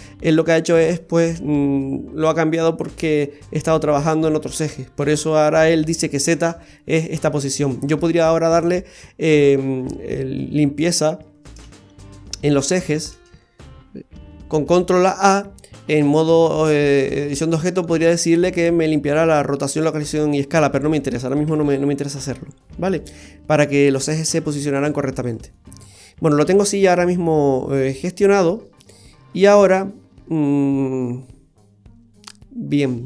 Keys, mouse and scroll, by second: 11.6 shift+a, 13.1 ctrl+a, 14.0 Tab, 21.5 Tab, 22.1 scroll up 1, 22.3 scroll down 1, 22.4-22.9 scroll up 3, 25.3-25.6 scroll down 2, 25.5 middle click.